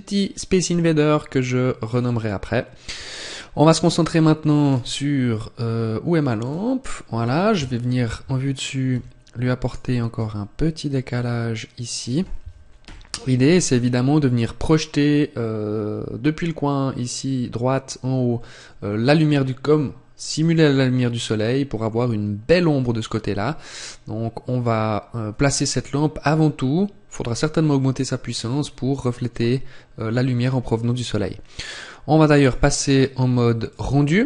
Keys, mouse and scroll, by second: 0.3 scroll down 2, 1.7 click, 4.3-4.7 scroll down 3, 4.5 scroll up 2, 6.3 click, 6.3-6.8 scroll up 2, 7.4 KP_7, 8.8 g, 9.5 click, 10.0 r, 11.9 click, 12.7 KP_1, 32.3 click.